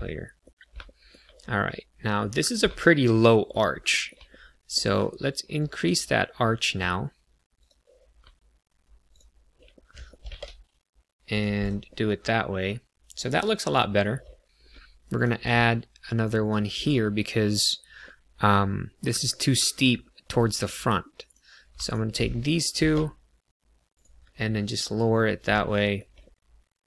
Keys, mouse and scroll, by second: 0.8 shift+middle click, 1.6 middle click, 3.1 shift+middle click, 3.8 middle click, 4.2 middle click, 5.5 click, 7.6 click, 9.0 shift+click, 9.7 middle click, 10.2 g, 10.2 z, 11.2 click, 11.6 click, 11.8 middle click, 14.7 ctrl+r, 16.4 click, 16.7 click, 18.0 middle click, 19.4 middle click, 20.2 middle click, 21.2 click, 21.7 shift+click, 22.2 middle click, 22.7 g, 23.9 click, 24.3 middle click, 25.6 shift+middle click, 26.1 middle click.